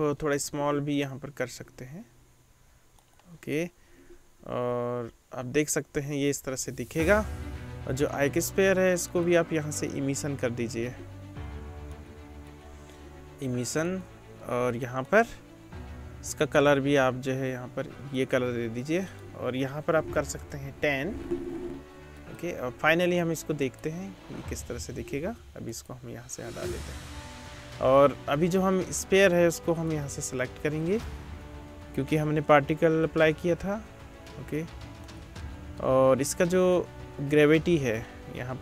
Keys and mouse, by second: 1.4 s, 4.6 space, 6.4 space, 8.1 middle click, 8.3 click, 9.1-12.0 middle drag, 12.0 click, 12.5-15.2 middle drag, 15.2-19.1 drag, 19.1-22.4 middle drag, 20.4 BackSpace, 22.4-29.8 drag, 25.7 middle click, 25.7 right click, 29.8 middle click, 30.0-38.6 drag.